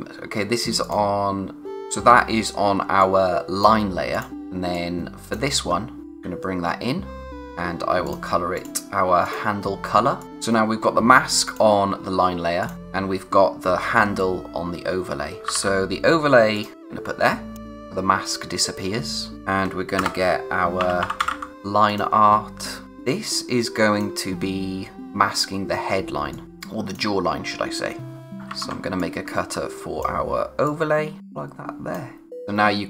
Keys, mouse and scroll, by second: 0.8 click, 5.7-6.0 scroll up 1, 7.2 click, 15.1-16.0 typing, 16.5 click, 18.6 click, 19.9 Return, 20.5-21.8 typing, 21.8 click, 22.8 space, 26.3 click, 26.4 space, 26.6 click, 26.9 space, 28.2 ctrl+c, 28.5 ctrl+v, 29.0 click, 30.6 click.